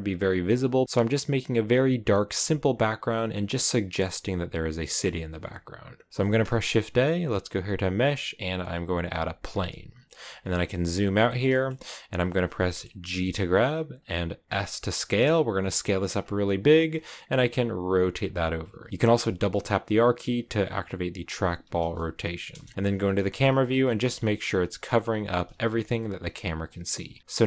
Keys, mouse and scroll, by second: 0.0-0.8 scroll up 1, 0.8-1.3 scroll down 4, 3.2 right click, 4.6-5.2 scroll up 1, 5.2 a, 9.4 scroll down 3, 9.6 middle click, 10.0 scroll up 1, 10.2-10.6 scroll down 4, 10.6 middle click, 11.0 scroll down 1, 11.2-13.0 shift+middle drag, 13.0 g, 14.3 s, 16.7 middle click, 17.1 r, 18.1 r, 18.8 scroll down 1, 18.9 r, 21.9 KP_1, 22.4 KP_0, 22.8 scroll down 1, 23.0 g, 24.3-25.9 typing, 26.9 s, 27.3-27.4 shift+middle drag.